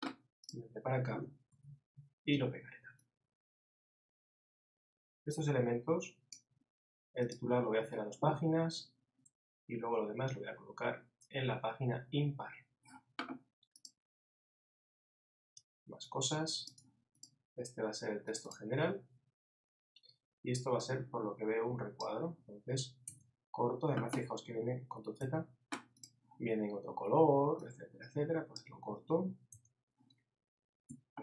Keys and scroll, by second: 1.5 super+v, 25.2 super+z.